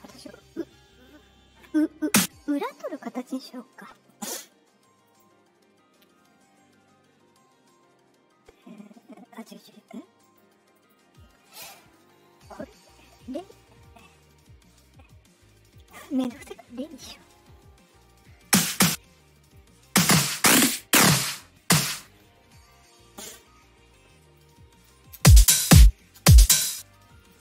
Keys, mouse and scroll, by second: 1.9 click, 4.0 click, 5.0 click, 10.2 click, 10.7 click, 12.7 right click, 15.7 click, 17.5 middle click, 18.4 click, 19.4 right click, 19.8-21.9 drag, 22.6 click, 24.3 click, 25.1 space, 25.6 space, 26.1 space, 26.6 space, 27.1 click.